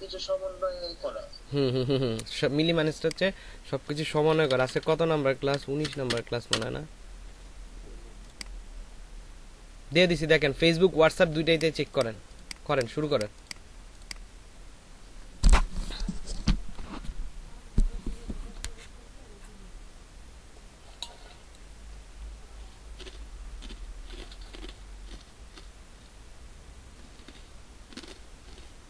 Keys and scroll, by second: 4.1-6.5 typing.